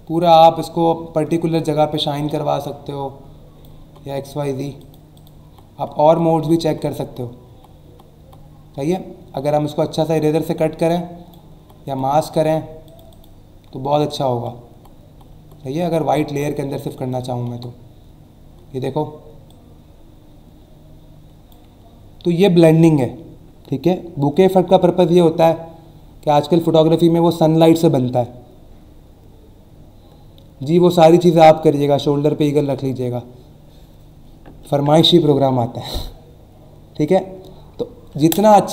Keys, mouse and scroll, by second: 3.8 Down, 4.8 click, 5.1 click, 10.9 click, 11.5 Down, 12.8 click, 19.5 click.